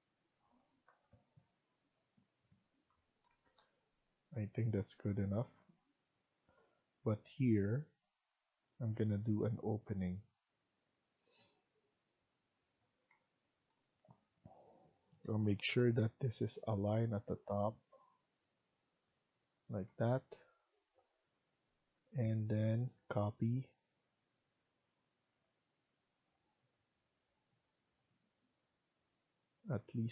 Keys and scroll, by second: 0.8 Right, 1.0 Right, 1.2 Right, 1.3 Right, 1.7 Right, 3.1 Escape, 3.4 Escape, 12.7 Escape, 13.0 Escape, 15.1-15.7 typing, 19.8 Escape, 20.0 Escape, 21.8 Escape, 22.4 Tab.